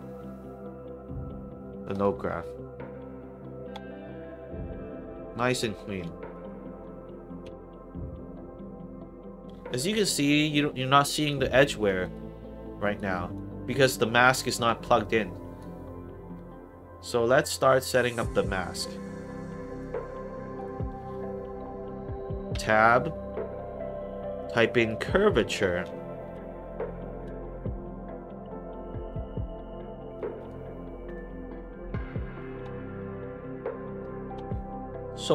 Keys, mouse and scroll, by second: 1.8 click, 3.7 click, 4.8 click, 6.3 click, 8.7 middle click, 10.1 alt+click, 10.7 alt+right click, 11.0 alt+click, 11.4 alt+middle click, 11.8 alt+right click, 12.1 alt+click, 13.1 alt+right click, 13.4 alt+middle click, 14.9 click, 15.8 scroll down 2, 16.2 middle click, 17.0 middle click, 17.3 scroll down 2, 17.7 middle click, 18.4 middle click, 18.8 scroll down 1, 19.0 middle click, 19.6 click, 19.7 right click, 20.5 click, 22.5 Tab, 24.8-26.1 typing, 26.2 Down, 28.4 click, 29.4-29.7 scroll up 3, 30.1 click, 31.0 click.